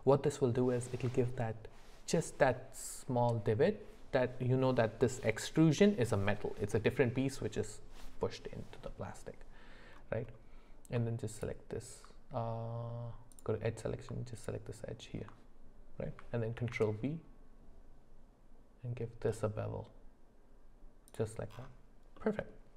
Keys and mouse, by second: 11.3 alt+click, 14.4 alt+click, 16.6 ctrl+b, 22.2 middle click.